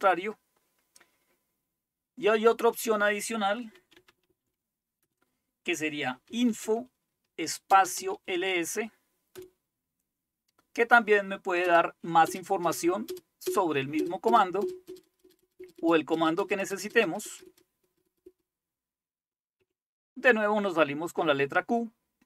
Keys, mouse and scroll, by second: 0.7-3.8 scroll down 1, 3.6-9.4 typing, 3.8 scroll down 1, 11.5-18.3 typing, 19.7 q.